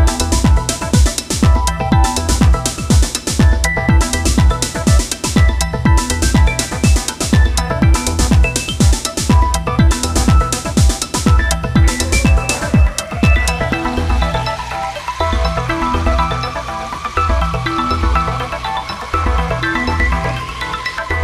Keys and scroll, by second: 3.8 space, 6.8 ctrl+z, 18.8 ctrl+z.